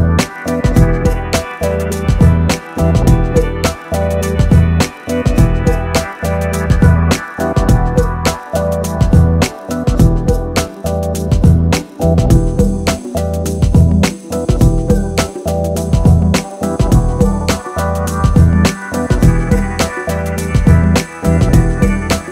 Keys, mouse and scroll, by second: 0.0-16.6 typing, 0.1 middle click, 0.4 middle click, 1.1 middle click, 1.3 scroll down 1, 1.4 shift+middle click, 1.4 Tab, 1.5 click, 1.6 shift+middle click, 1.9 shift+middle click, 2.5 middle click, 2.8 middle click, 3.9 middle click, 4.4 ctrl+z, 4.5 shift+middle click, 5.0 shift+middle click, 5.2 scroll up 3, 7.9 middle click, 8.0 scroll up 3, 8.2 middle click, 8.5 middle click, 8.7 middle click, 8.8 Tab, 8.9 middle click, 9.0 middle click, 9.4 click, 9.5 shift+middle click, 9.9 middle click, 10.0 alt+click, 10.7 middle click, 11.0 middle click, 11.1 scroll up 1, 11.3 scroll down 3, 11.5 shift+middle click, 11.7 alt+click, 11.8 alt+m, 11.9 middle click, 12.2 middle click, 12.4 shift+middle click, 12.6 middle click, 12.8 middle click, 13.0 Tab, 13.1 scroll up 5, 13.2 middle click, 13.6 scroll down 8, 13.7 middle click, 13.8 middle click, 13.9 click, 14.1 Tab, 14.2 shift+middle click, 14.8 middle click, 15.0 scroll up 2, 15.1 middle click, 15.4 middle click, 15.6 shift+click, 15.8 middle click, 16.1 middle click, 16.4 click, 16.7 scroll down 2, 16.7 middle click, 16.8 shift+click, 16.9 middle click, 17.1 scroll up 1, 17.3 shift+middle click, 17.7 shift+click, 17.8 middle click, 17.9 g, 18.2 middle click, 18.4 Tab, 18.5 2, 18.5 scroll up 2, 18.6 shift+middle click, 18.7 alt+click, 18.8 middle click, 18.8 alt+shift+click, 18.9 shift+middle click, 19.3 scroll up 1, 19.3 shift+middle click, 19.4 click, 19.5 scroll down 3, 19.7-22.3 typing, 20.0 scroll up 9, 20.2 Tab, 20.3 scroll down 9, 20.4 click, 20.6 middle click, 20.8 scroll down 2, 21.2 middle click, 21.5 middle click, 21.8 middle click, 22.0 Tab, 22.1 scroll up 1.